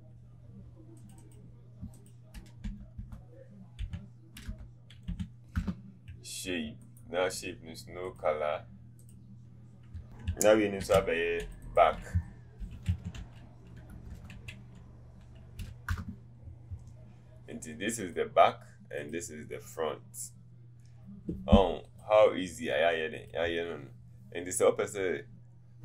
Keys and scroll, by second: 2.7 BackSpace, 3.1 BackSpace, 14.1 typing, 15.5 k, 15.8 Return.